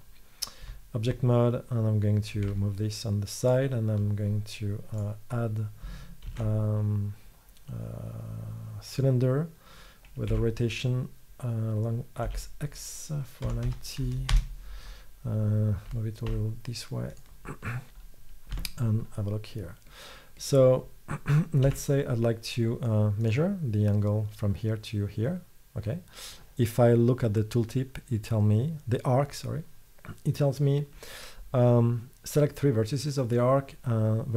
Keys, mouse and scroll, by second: 0.7 z, 2.6 g, 6.4 shift+a, 10.4 r, 16.4 g, 18.6 Tab, 21.8 a, 25.2-34.3 middle drag.